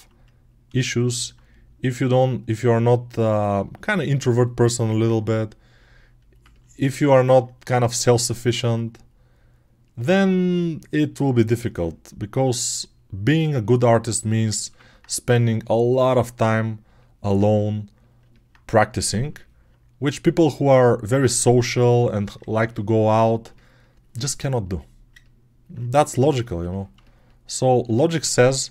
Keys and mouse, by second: 14.5-28.7 ctrl+alt+right drag.